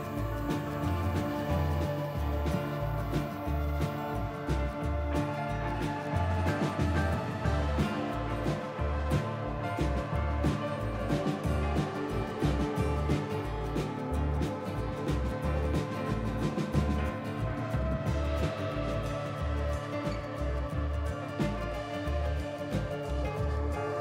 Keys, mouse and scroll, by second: 0.4 click, 0.6 g, 2.2 click, 2.4 g, 3.7 click, 4.0 g, 5.6 click, 5.8 g, 6.8 click, 7.0 g, 8.6 click, 8.9 g, 10.0 g, 11.6 click, 11.8 g, 12.8 click, 13.0 g, 14.0 click, 14.2 g, 15.0 click, 15.2 g, 16.5 click, 16.7 g, 18.7 click, 19.0 g, 20.6 click, 20.8 g, 22.6 click, 22.9 g.